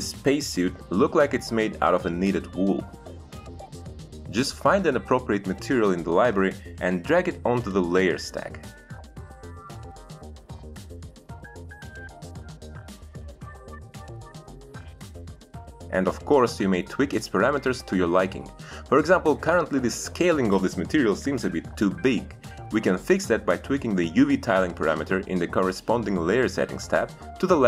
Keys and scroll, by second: 10.2 f, 11.2 Return, 24.6 5, 24.7 Return.